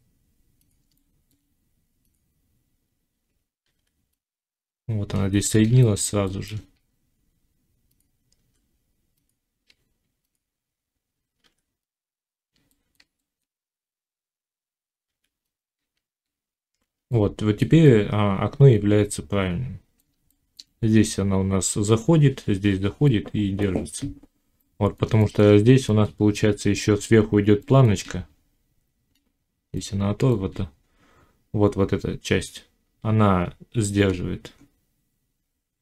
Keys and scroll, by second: 8.3 g, 15.0 g.